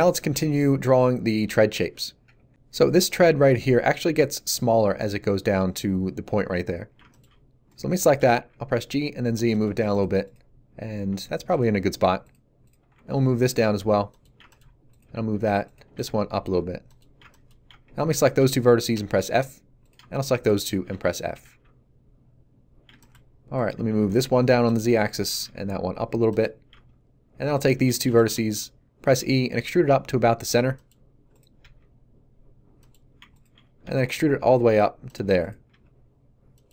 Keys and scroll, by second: 8.2 g, 8.3 z, 10.9 g, 12.9 z, 15.0 g, 15.1 z, 15.8 g, 15.9 z, 18.9 f, 21.3 a, 23.7 g, 23.9 z, 25.3 g, 25.4 z, 29.0 e, 31.6 g, 33.8 e, 35.6 g.